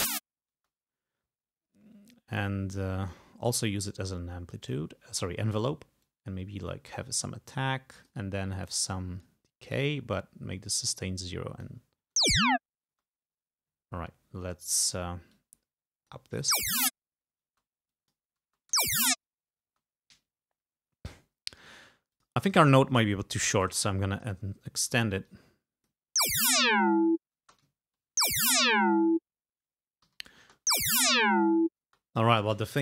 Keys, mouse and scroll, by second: 0.7 space, 4.7 click, 6.2-8.4 drag, 8.8 click, 11.1-12.2 drag, 12.3 space, 13.0 space, 14.7 click, 15.5-16.5 drag, 16.6 space, 17.6 space, 18.0 click, 18.5 space, 19.7 space, 22.2 click, 23.4 g, 23.9 click, 24.9 e, 25.3 click, 26.3 space, 27.5 space, 27.9 ctrl+scroll down 2, 28.3 ctrl+space, 30.2 g, 30.5 space, 31.3 ctrl+scroll down 2, 32.0 ctrl+space.